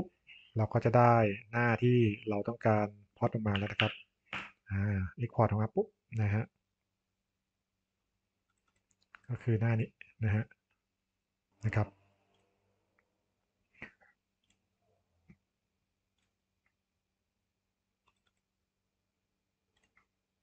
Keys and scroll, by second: 4.3 Return, 8.0 super+e.